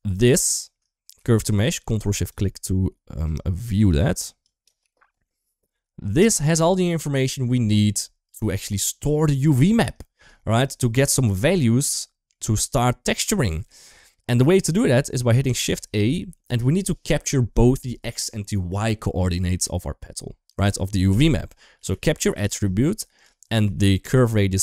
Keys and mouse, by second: 0.3 shift+click, 1.2 shift+click, 1.9 shift+click, 4.4 click, 4.7-5.0 shift+middle drag, 5.2 shift+middle drag, 6.1 shift+middle drag, 8.0-8.6 drag, 9.2 click, 10.6 shift+middle drag, 10.9 middle click, 11.7 middle drag, 13.2 middle drag, 14.6 shift+middle click, 15.1 shift+a.